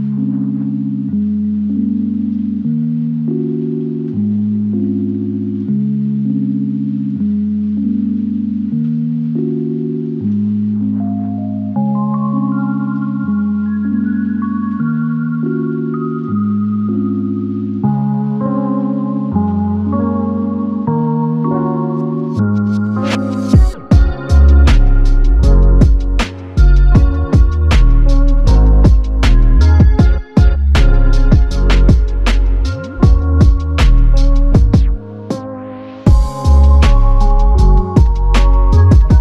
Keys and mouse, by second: 1.3 ctrl+click, 2.2 ctrl+i, 4.4 alt+click, 5.1 ctrl+click, 9.7 ctrl+click, 10.6 ctrl+i, 14.6 alt+click, 16.1 ctrl+i, 17.1 alt+click, 17.9 ctrl+shift+click, 20.7 alt+m, 21.6 shift+click, 24.6 shift+click, 26.3 shift+click, 28.7 alt+click, 30.7 alt+click, 31.0 ctrl+z, 31.9 shift+click, 35.1 alt+click, 35.7 shift+click, 36.8 shift+click, 38.8 alt+click.